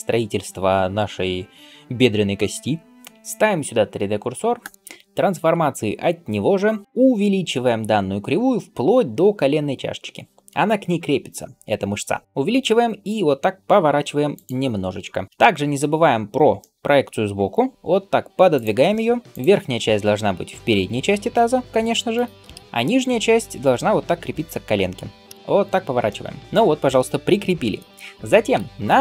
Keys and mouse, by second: 3.1 shift+g, 4.5 shift+right click, 4.6-22.0 shift+middle drag, 11.1 s, 12.9 r, 17.7 g, 22.0 shift+right click, 22.1-28.4 shift+middle drag, 25.1 KP_3, 25.4 r, 28.6-29.0 middle drag.